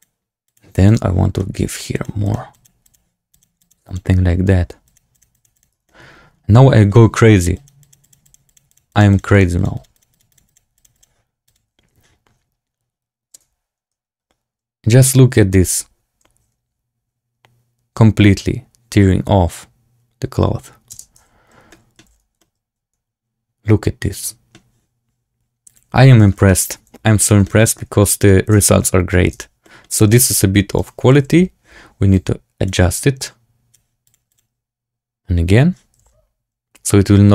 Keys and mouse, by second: 1.0 click, 1.3 middle click, 1.9 click, 2.1 click, 2.4 click, 2.8 click, 3.2 click, 3.5 click, 3.8 click, 4.8 click, 5.0 click, 5.2 click, 5.5 click, 5.8 shift+click, 7.5 click, 7.7 click, 7.9 click, 8.2 click, 8.4 click, 9.0 click, 9.7 click, 9.8 click, 10.0 click, 10.2 click, 10.4 click, 10.7 click, 10.9 click, 11.4-12.8 drag, 13.2 space, 21.0 space, 21.1 z, 21.6 middle drag, 22.0 z, 22.3-24.4 middle drag, 25.6-26.0 drag, 26.1 shift+middle drag, 26.4-27.1 middle drag, 27.4 shift+middle drag, 27.7-28.2 drag, 28.4-31.0 typing, 29.5 drag, 30.7 click, 32.2-33.6 drag, 34.0 click, 34.2 click, 36.4 z.